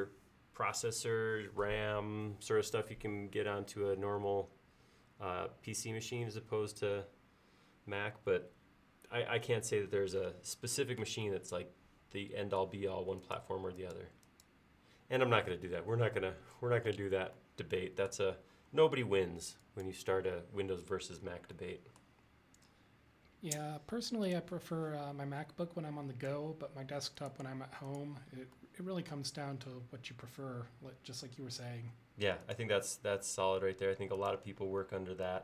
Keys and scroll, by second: 18.6 l, 34.7 e.